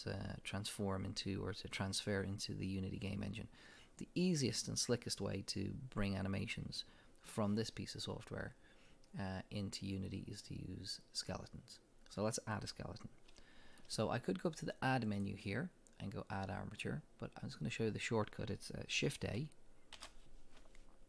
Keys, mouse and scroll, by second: 15.1-19.3 drag, 20.0 shift+a, 20.0 click.